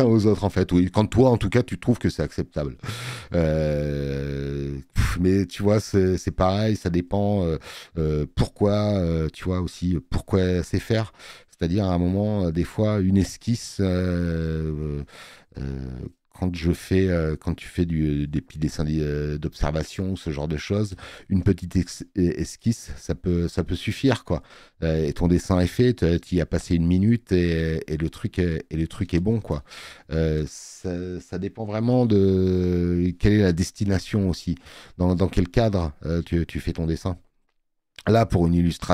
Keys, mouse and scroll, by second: 3.0 space, 3.2 click, 6.4 space, 6.6 click, 24.2 space, 24.4 click.